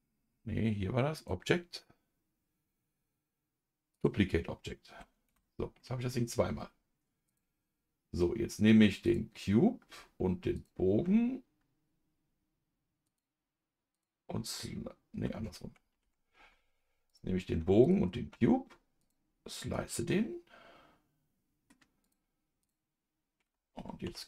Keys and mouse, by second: 1.1-5.8 drag, 5.8 middle click, 9.0 click, 10.5 ctrl+click, 13.0 click, 15.9 ctrl+z, 17.1 click, 17.8 ctrl+click, 19.0-20.0 drag, 20.0-21.7 middle drag, 22.0 click, 24.0 KP_Divide.